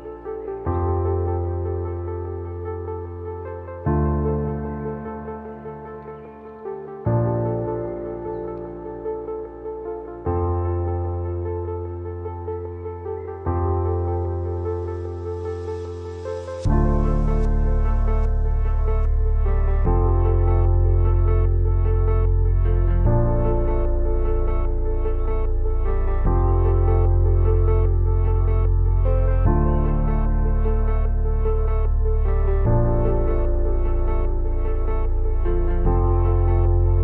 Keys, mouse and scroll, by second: 0.0-1.1 typing, 1.4 click, 3.4 scroll down 1, 8.6 scroll down 1, 10.8 scroll up 1, 11.7-18.6 drag, 18.6 Right, 20.4 Left, 22.8 scroll up 2, 24.4 space, 24.5 click, 24.9 space, 25.0 space, 25.4 space, 29.9 click, 35.5-35.8 scroll down 1, 36.4 scroll down 1.